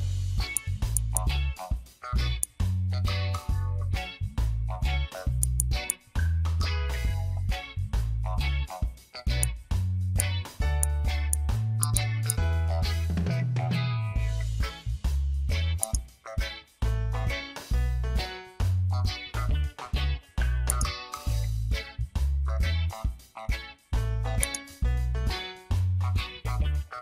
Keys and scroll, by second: 0.9 space, 5.4 space, 9.9 ctrl+z, 10.6 ctrl+z, 11.1 ctrl+z.